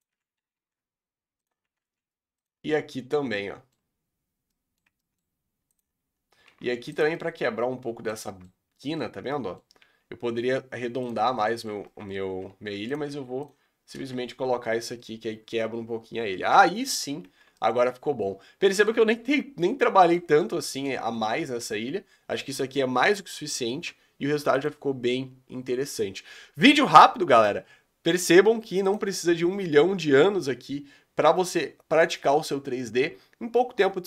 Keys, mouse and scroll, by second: 0.2 r, 1.9 r, 2.7-4.0 middle drag, 4.0-4.6 scroll down 3, 4.6 middle click, 5.2-5.7 scroll up 2, 5.7-6.1 drag, 6.6 alt+d, 7.2-8.6 middle drag, 8.6 scroll up 2, 8.8-9.9 middle drag, 9.9 g, 11.3 middle click, 12.2 scroll up 2, 12.5 r, 13.2 g, 14.1 alt+a, 14.4-15.0 scroll down 8, 15.0-24.5 middle drag, 24.5 click.